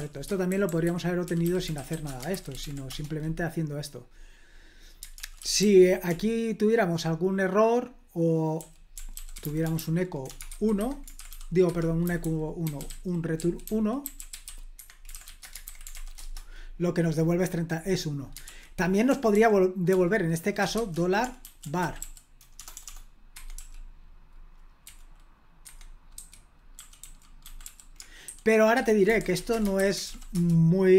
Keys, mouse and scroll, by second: 0.0 super+l, 0.3-2.4 typing, 2.9 ctrl+p, 5.2 super+l, 5.4-7.0 typing, 8.3-15.7 typing, 10.8 Escape, 16.2 super+h, 18.5 super+l, 19.1-23.6 typing, 23.3 Escape, 24.8 v, 25.6 Escape, 26.2-29.7 typing, 28.7 Escape, 29.8 super+h, 30.0 ctrl+p, 30.3 Return.